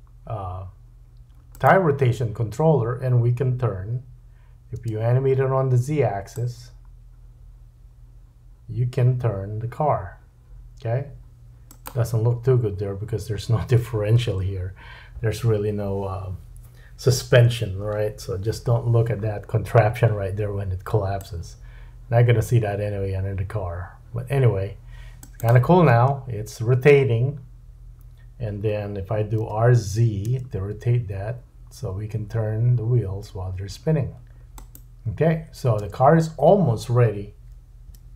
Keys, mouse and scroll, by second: 4.8 space, 6.3-11.8 drag, 21.2-25.5 drag, 25.9 space, 29.4 r, 35.9 space, 37.9 /.